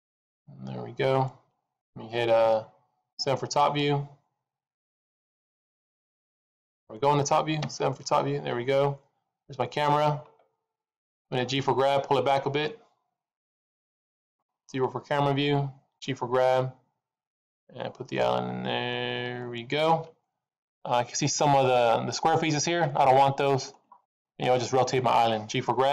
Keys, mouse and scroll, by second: 1.1 click.